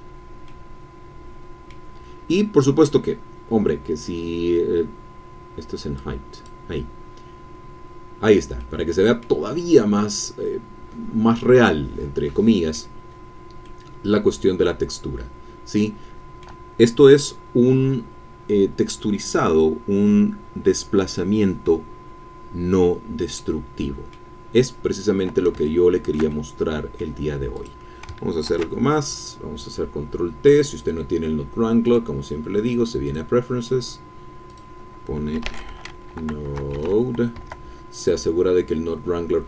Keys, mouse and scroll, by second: 0.0-0.5 ctrl+scroll down 1, 0.5-2.1 drag, 6.0-7.0 drag, 8.6 click, 9.5-10.7 scroll up 1, 10.7-11.4 scroll up 1, 11.6-13.0 middle drag, 13.0-13.5 scroll down 1, 13.5 scroll down 1, 13.6-16.6 middle drag, 16.6 scroll down 1, 23.4 middle click, 24.6-25.4 scroll down 1, 25.6-27.2 shift+middle drag, 27.6 click, 29.1 ctrl+t, 31.8 click, 33.0 click, 34.5 click, 35.1-36.8 typing, 37.4 Caps_Lock.